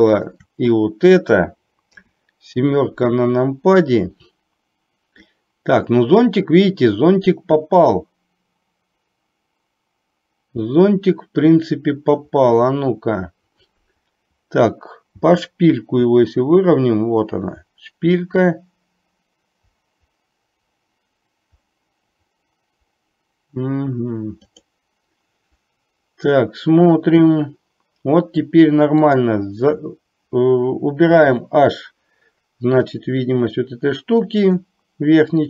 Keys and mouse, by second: 2.0 KP_7, 29.1 click, 31.1 h, 34.5 click.